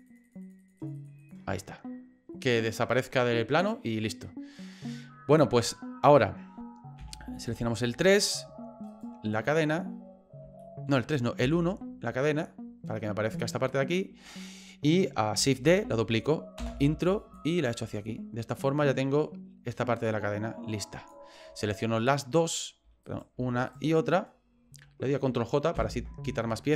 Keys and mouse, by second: 0.1 click, 0.2 click, 0.4 click, 0.6 click, 0.8 click, 0.9 click, 1.2 click, 3.6 right click, 7.0 KP_3, 8.9 right click, 10.6 shift+middle click, 11.4 KP_1, 13.8 shift+middle click, 17.3-21.1 drag, 22.3 shift+right click, 23.0 right click, 23.7 shift+right click, 25.8 ctrl+j.